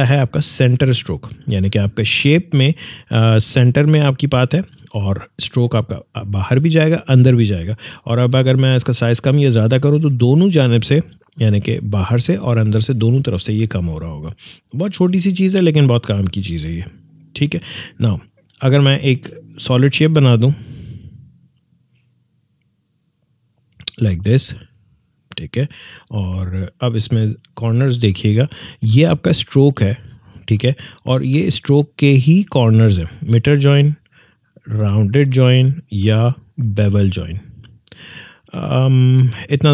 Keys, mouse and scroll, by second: 1.8 click, 8.8-11.8 drag, 15.0 click, 18.9 alt+scroll down 1, 20.8-24.7 drag, 26.0-26.8 alt+scroll up 1, 34.2 click, 38.8 alt+scroll up 1.